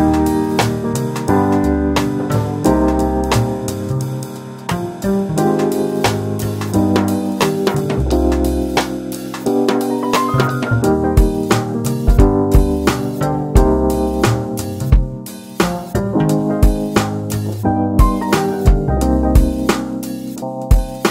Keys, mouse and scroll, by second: 1.1 e, 4.3 scroll down 4, 6.1 g, 9.7 r, 11.3 e, 13.5 middle click, 14.4 Tab, 14.8-16.2 middle drag, 16.2 ctrl+2, 16.6-17.0 scroll up 1, 17.0-18.8 middle drag, 18.8 ctrl+r, 19.7 Tab, 20.2-21.1 middle drag.